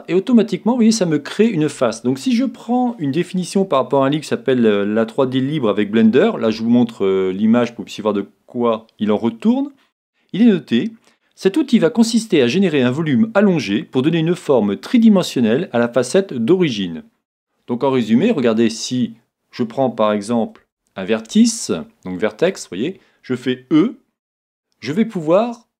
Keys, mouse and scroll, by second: 1.4-3.2 drag, 18.5-20.7 middle drag, 20.6 ctrl+Tab, 22.4-24.1 right drag, 23.7 e.